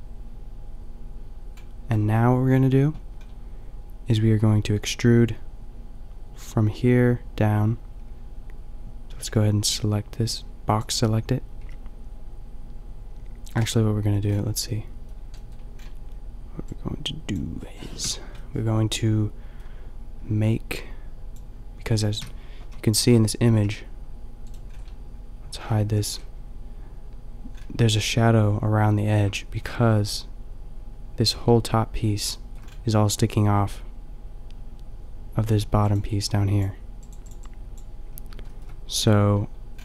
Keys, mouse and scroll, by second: 9.3 b, 15.4-18.0 middle drag, 18.0 KP_5, 21.3 click, 22.1 KP_5, 22.6 a, 23.1 Tab, 23.5 g, 25.8 h, 29.4-32.3 middle drag, 32.4-38.3 shift+middle drag.